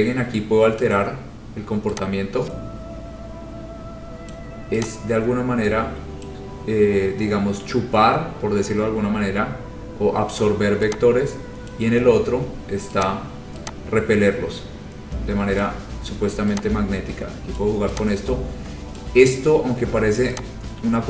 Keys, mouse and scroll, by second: 4.4 click, 6.4 click, 9.9-10.3 scroll, 11.9 click, 13.2 click, 15.7 click, 17.7 click, 19.1 click, 19.5-20.1 scroll.